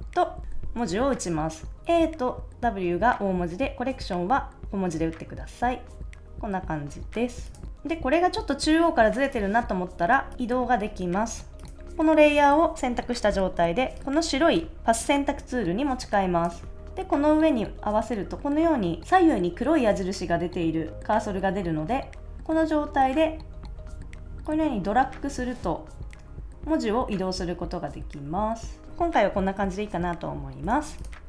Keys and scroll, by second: 30.6 super+s.